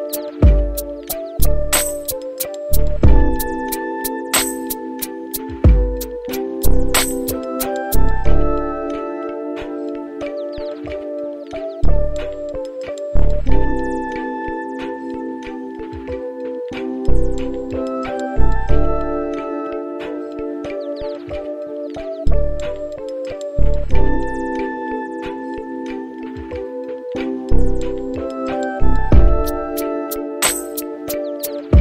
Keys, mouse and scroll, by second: 1.5-4.5 drag, 9.2 click, 13.9 middle click, 16.9-18.6 middle drag, 19.6 space, 26.9 space, 28.0-31.8 drag.